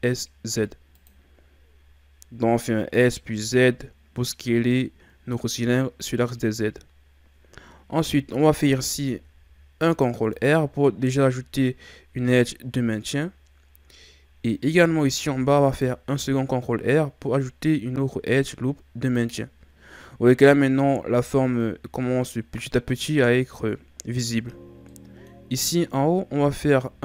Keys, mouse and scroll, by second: 8.6 ctrl+r, 11.4-13.3 scroll up 2, 13.3-14.2 scroll down 1, 15.2 ctrl+r, 20.5-23.5 middle drag, 24.9-26.3 middle drag, 26.3 ctrl+Tab.